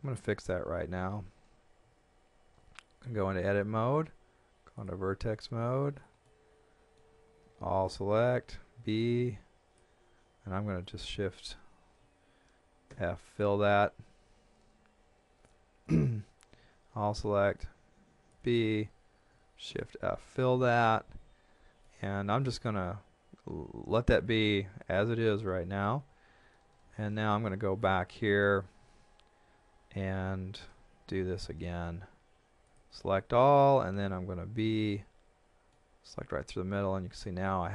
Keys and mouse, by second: 0.5 KP_1, 1.8 z, 3.0 Tab, 4.8 click, 5.4 middle click, 7.4 a, 8.4 b, 9.0 click, 16.5 a, 17.0 b, 17.6 click, 19.7 shift+f, 21.8 middle click, 24.4 middle click, 26.0 KP_3, 27.8 shift+middle click, 28.5 a, 30.8 KP_1, 32.7 click, 34.0 b, 34.9 middle click.